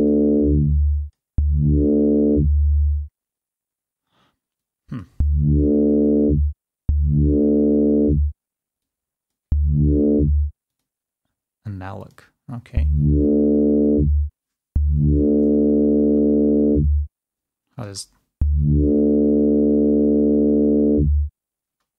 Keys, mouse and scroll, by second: 0.8 click, 1.8 click, 4.6 click, 9.1 click, 10.8 click, 12.1 click, 18.1 space.